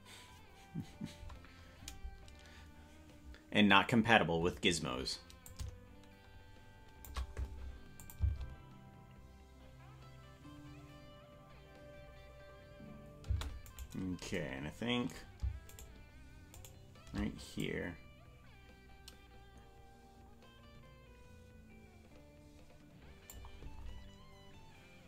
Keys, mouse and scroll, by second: 5.4-7.1 drag, 8.0-12.1 drag, 8.2 space, 13.9 right click, 15.9-17.6 shift+right drag, 17.6-23.4 drag.